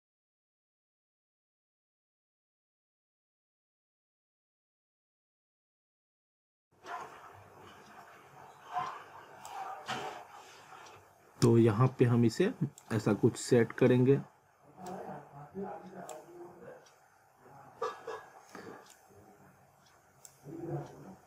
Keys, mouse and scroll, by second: 2.3 click, 4.7-5.1 typing, 5.9 click, 9.5 click, 13.1 middle click, 14.0-14.9 scroll up 1, 14.9 click, 16.4 scroll down 1, 17.8 scroll up 1, 18.5 middle click, 20.3 click.